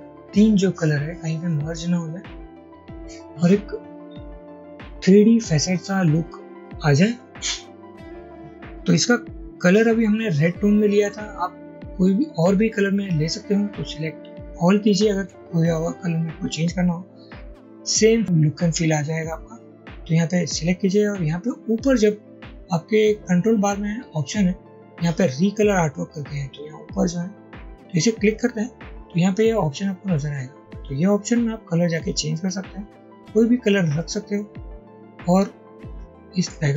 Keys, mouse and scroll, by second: 15.2 ctrl+a.